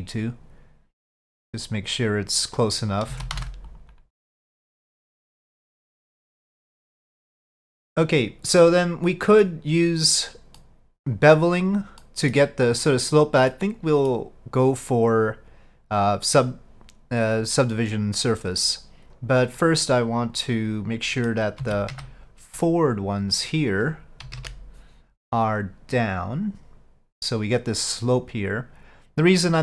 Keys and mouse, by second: 3.2 alt+a, 3.4 c, 4.6-6.7 drag, 7.5 middle click, 8.7 middle click, 10.7 middle click, 12.1 middle click, 13.6 middle click, 17.5-19.1 drag, 19.7-21.5 middle drag, 21.7 alt+a, 22.0 c, 24.3 KP_5, 24.4 KP_1, 26.0-29.6 drag.